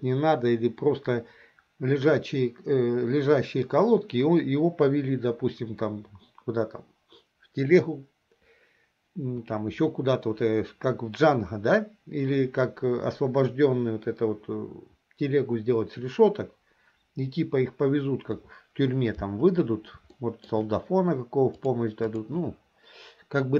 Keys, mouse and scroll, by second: 20.2-20.6 shift+middle drag, 21.6-22.3 drag.